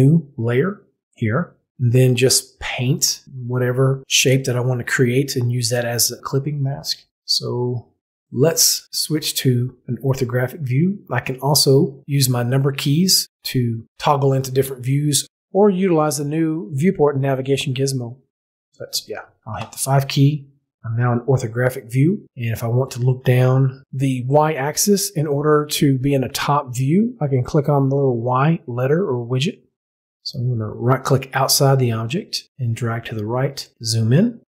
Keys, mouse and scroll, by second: 12.8 click, 19.5 KP_5, 24.6 click, 30.9-32.6 right drag.